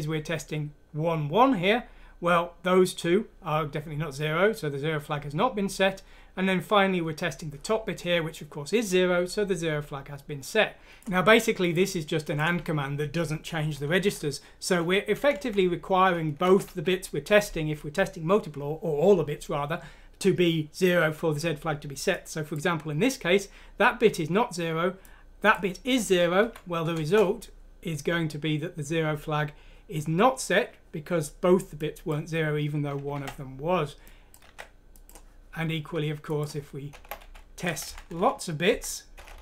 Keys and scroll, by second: 26.4 F6, 26.9 Return, 33.1 alt+Tab, 34.5 alt+Tab, 36.9 BackSpace.